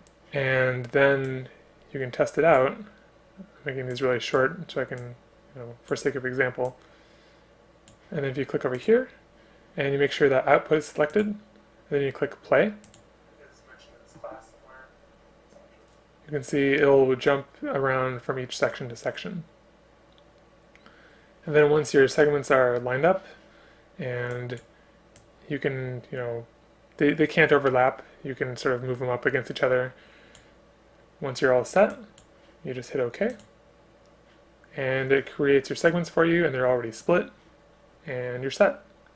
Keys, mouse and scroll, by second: 6.9 space, 29.1 ctrl+click, 30.4 Return.